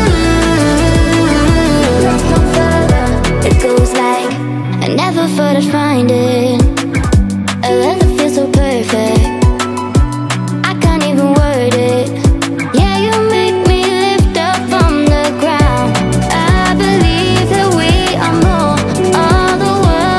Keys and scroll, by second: 1.5 Caps_Lock, 1.6-3.5 typing, 9.8-12.5 typing.